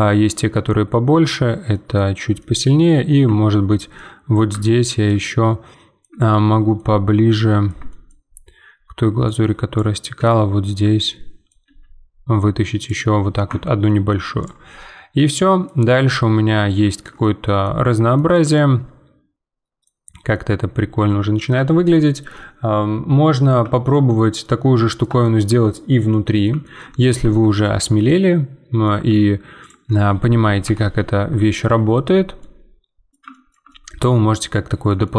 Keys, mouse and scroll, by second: 2.1 scroll up 2, 2.4 middle click, 2.9-3.2 scroll up 2, 3.2 Tab, 3.9-8.2 middle drag, 8.2-9.2 scroll up 1, 9.2 click, 10.1 z, 10.8 z, 11.0 middle click, 11.6 e, 13.5 Tab, 13.8 middle click, 14.1 scroll down 1, 14.4 click, 14.7-15.7 middle drag, 15.7 scroll down 2, 16.0-17.6 middle drag, 17.6 scroll down 1, 18.1-19.9 shift+middle drag, 19.9-20.3 scroll down 2, 20.3-24.0 middle drag, 24.0-24.4 scroll up 4, 24.4-27.0 middle drag, 27.0 scroll up 1, 27.2 Tab, 27.6-29.6 shift+middle drag, 29.6-30.6 drag, 30.6 KP_Decimal, 31.3-32.4 scroll down 10, 32.4-35.1 middle drag.